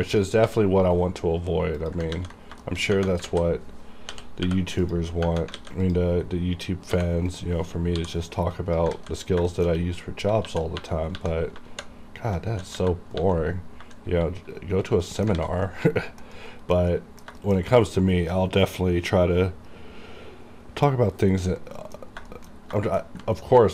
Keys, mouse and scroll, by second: 0.2 click, 0.5 g, 0.9 right click, 1.9 click, 2.2 ctrl+a, 2.7 shift+middle click, 2.9 scroll up 2, 3.4 alt+a, 4.2 typing, 4.9 click, 5.6 alt+a, 5.9 click, 5.9 click, 6.2-6.7 scroll down 1, 7.0 scroll up 1, 7.0 g, 7.4 right click, 8.0 m, 8.6 click, 9.0 alt+a, 9.3 scroll down 1, 9.6 shift+middle click, 9.9 scroll down 1, 10.5-12.8 typing, 14.2 shift+#, 15.1 middle click, 15.5 alt+a, 15.8 middle click, 16.5 middle click, 17.0 middle click, 17.4 shift+middle click, 17.8-19.6 scroll down 2, 21.4 scroll up 1, 21.9 middle click, 21.9 middle click, 22.1 scroll down 1, 22.2 scroll up 1, 22.3-22.7 scroll down 2, 22.3 shift+middle click, 22.9 shift+middle click, 23.4 ctrl+middle click.